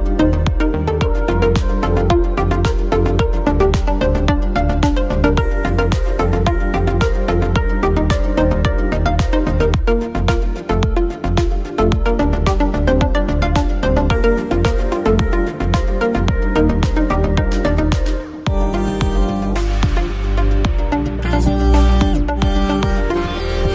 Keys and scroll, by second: 4.3 shift+space, 6.8 shift+space, 7.7 space, 9.6 ctrl+a, 10.0 ctrl+t, 21.4 shift+space.